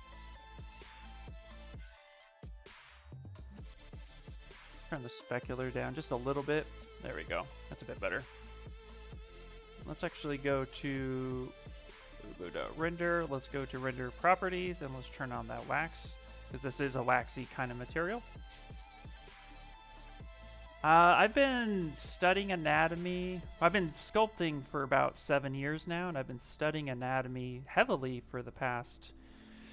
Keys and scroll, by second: 29.5 ctrl+z.